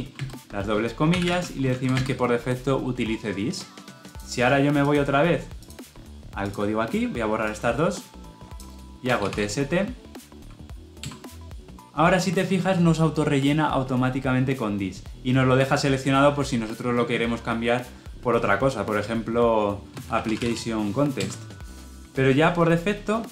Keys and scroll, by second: 10.9 Return, 21.0 Return.